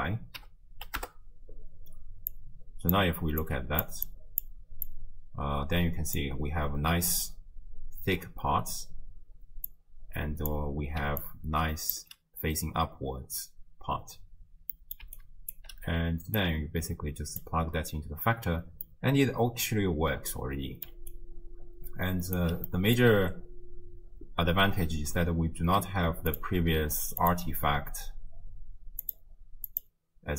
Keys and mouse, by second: 2.3-3.0 drag, 3.4 drag, 4.1 click, 4.9-6.2 drag, 9.7 click, 11.0 d, 11.2-12.7 drag, 12.0 d, 12.7 d, 14.8 click, 14.8 middle click, 15.2 right click, 15.2 d, 15.5 d, 15.6 d, 16.4-17.4 drag, 19.0-20.9 drag, 19.0-20.9 middle drag, 21.1-22.4 right drag, 22.8 middle click, 22.8 d, 26.3-27.3 drag, 29.1-29.9 drag.